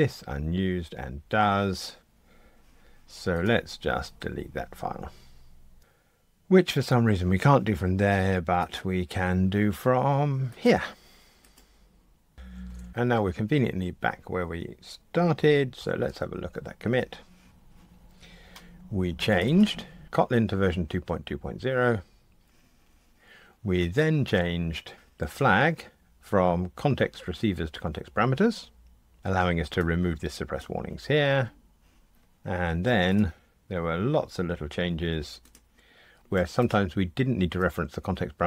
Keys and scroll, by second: 11.5 Delete, 16.1 super+k.